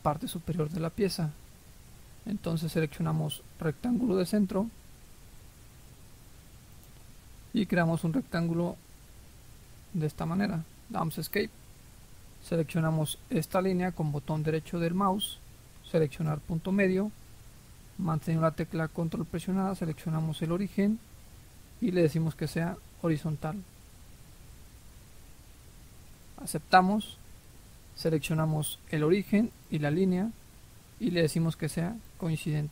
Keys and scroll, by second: 10.9 Escape.